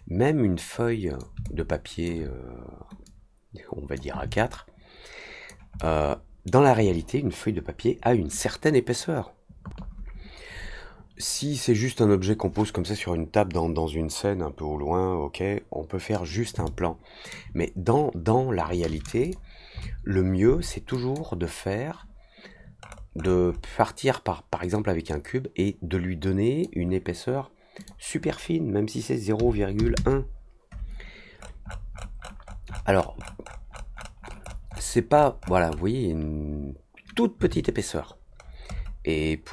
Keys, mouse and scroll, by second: 1.4-2.0 alt+drag, 3.0-3.9 drag, 4.3-5.4 alt+drag, 5.7-6.4 alt+middle drag, 16.6-17.2 alt+middle drag, 19.2 click, 20.9 click, 22.8 middle click, 23.1 middle click, 23.4 middle click, 24.7-26.6 drag, 27.7 click, 31.2 middle drag, 31.2-34.1 scroll up 18, 31.6 middle click, 31.8 middle click, 32.1 middle click, 34.2 middle drag, 34.8 middle click, 35.0 middle click, 35.3 middle click, 35.6 middle click, 38.3 middle click, 38.6 middle click.